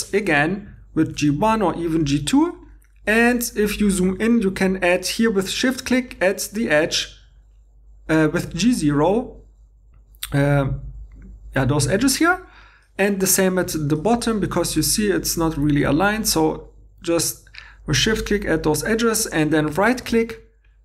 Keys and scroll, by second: 1.2 Tab, 15.7 2, 20.0 shift+e.